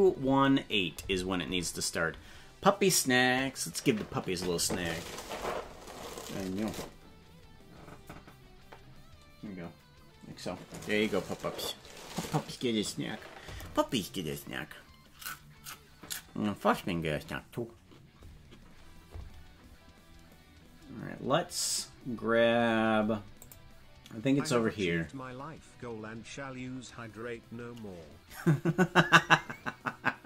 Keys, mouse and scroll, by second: 23.4 click.